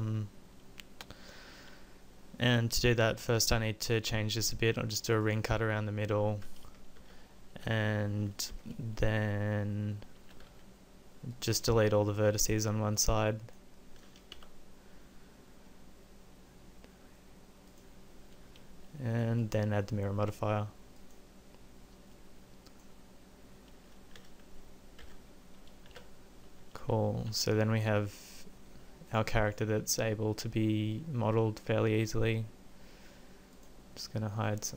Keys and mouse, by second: 3.4 ctrl+r, 6.6 KP_5, 7.0 KP_1, 7.6 z, 8.5 KP_5, 10.2 a, 10.5 b, 14.4 Delete, 25.0 Tab, 25.9 z, 26.8 a, 27.3 a, 32.5-33.5 middle drag.